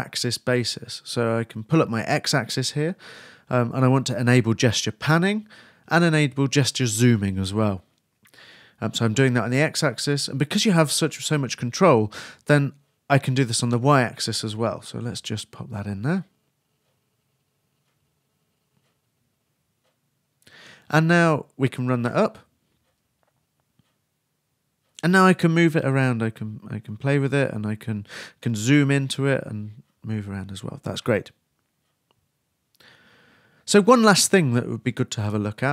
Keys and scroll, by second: 0.2-1.4 typing, 4.8-6.0 typing, 11.9-12.7 typing, 13.8-14.7 typing, 18.2-19.3 typing, 19.5 super+s, 19.7 super+r, 20.3 super+Return.